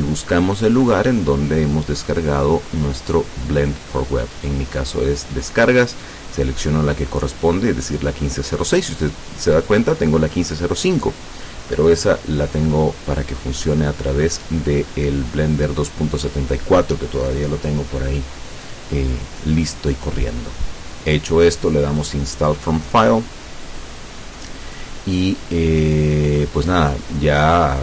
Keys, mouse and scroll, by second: 4.3 click, 6.6 click, 22.0 click.